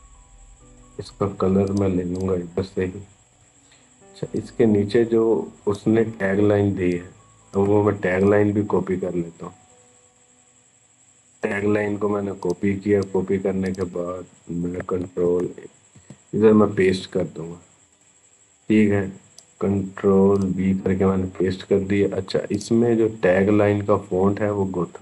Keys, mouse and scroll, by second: 11.2 right click, 12.2 click, 14.8 ctrl+a, 15.7 ctrl+v, 17.7-20.2 drag, 22.3 click.